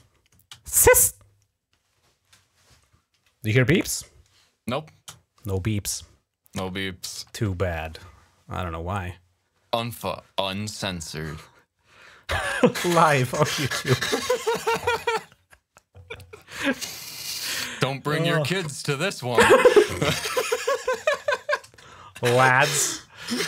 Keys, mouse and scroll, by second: 5.1 shift+scroll down 2, 5.8-6.3 shift+scroll down 2, 7.4 shift+scroll up 2, 8.1-9.5 shift+scroll down 6, 9.9-11.1 scroll up 8, 11.6-11.9 shift+scroll up 3.